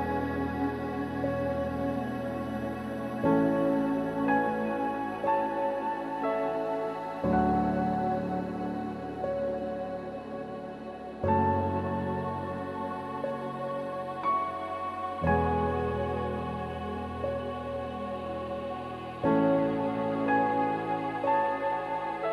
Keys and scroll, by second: 4.4 ctrl+-, 7.2 ctrl+t, 11.1 ctrl+z.